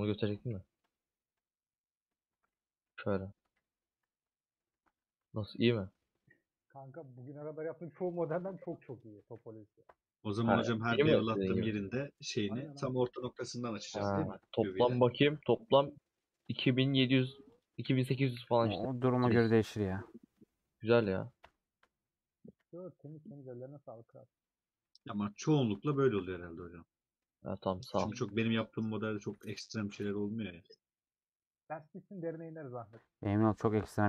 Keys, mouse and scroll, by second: 2.8 /, 3.4 /, 3.7 middle click, 4.2 Tab, 4.2 middle click, 4.7 3, 5.6-7.1 middle drag, 7.1 a, 8.0 middle click, 8.4 3, 9.9 ;, 10.3-11.3 middle drag, 11.3 2, 12.4 middle click, 13.0-13.4 scroll up 3, 13.4 shift+middle click, 13.9-14.6 scroll up 3, 14.6-16.6 middle drag, 16.6 alt+click, 17.7 alt+click, 17.8 alt+z, 18.3-19.3 middle drag, 19.3 alt+click, 19.4-21.5 middle drag, 21.5 ;, 21.8 scroll down 2, 22.0 middle click, 22.5 a, 23.5 middle click, 24.0 scroll up 3, 24.8 middle click, 25.0 alt+z, 25.3 middle click, 25.6 alt+z, 25.8-26.6 scroll up 4, 25.9 shift+middle click, 26.6 middle click, 27.2-27.8 scroll down 3, 28.5 click, 29.1 a, 29.9 scroll down 3, 30.1-32.4 middle drag, 32.4 scroll up 1, 32.5 scroll down 2, 32.7-34.0 middle drag.